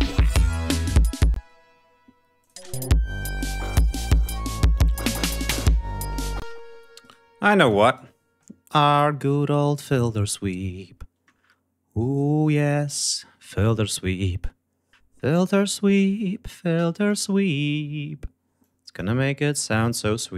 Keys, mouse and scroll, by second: 1.3 space, 2.4 click, 2.6 space, 2.8 ctrl+scroll up 1, 6.3 space, 7.0 right click, 7.6 click, 7.8 right click, 13.0 click, 15.5-17.2 drag, 18.6 click, 19.3 scroll down 2.